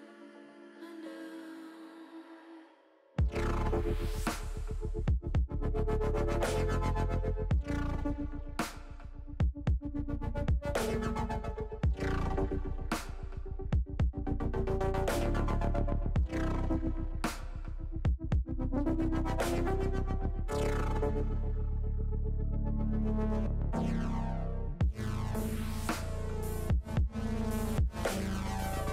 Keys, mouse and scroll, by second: 1.0 middle click, 1.2 middle click, 3.5 KP_1, 25.4 middle click, 27.3 middle click.